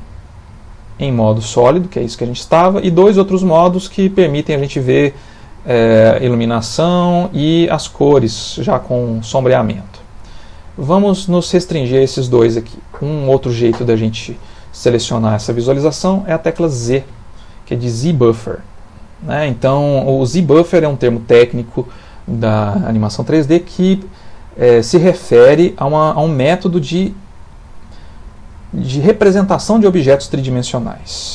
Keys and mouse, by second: 1.4 click, 5.3 click, 7.1 click, 8.1 middle click, 10.8 click, 15.5 middle click, 16.9 z.